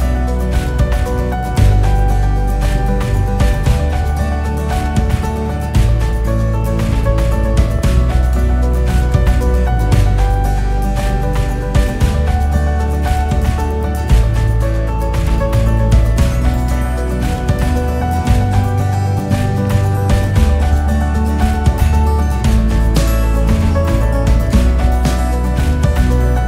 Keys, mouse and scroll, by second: 0.1 click, 5.8 click, 5.9 scroll up 4, 6.0 scroll down 1, 6.7 scroll up 4, 8.7 click, 11.2 click, 11.8 click, 11.9 scroll down 2, 12.6 click, 14.2 g, 19.1 click, 20.0 scroll down 4, 21.4 KP_0, 22.1 KP_0, 23.1 scroll down 5, 23.7-24.2 scroll up 4.